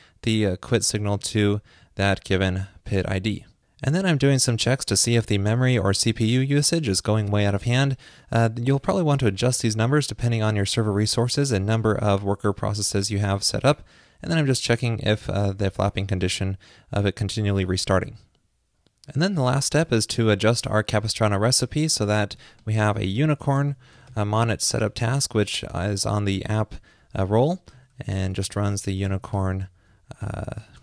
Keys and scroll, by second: 22.3 ctrl+shift+d, 24.9 typing, 28.0-28.4 typing.